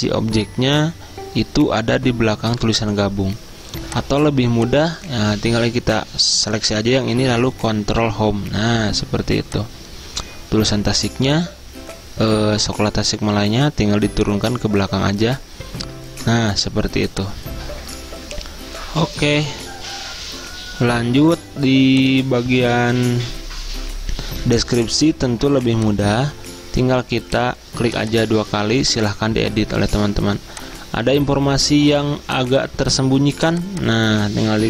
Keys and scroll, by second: 8.1 ctrl+Home, 11.1 ctrl+Page_Down, 21.2 z, 23.0 z.